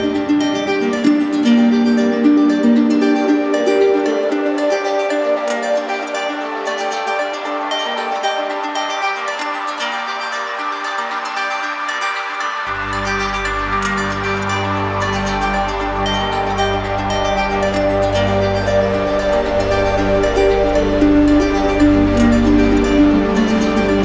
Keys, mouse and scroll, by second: 0.8 alt+click, 2.9 right click, 4.1 click, 4.9 click, 5.5 ctrl+z, 7.1 click, 8.5 click, 9.1 ctrl+z, 9.7 click, 11.2 click, 12.1 click, 13.7 click, 14.4 ctrl+z, 15.3 click, 16.2 click, 18.1 click, 18.7 click, 20.0 click, 20.6 click, 21.5 click.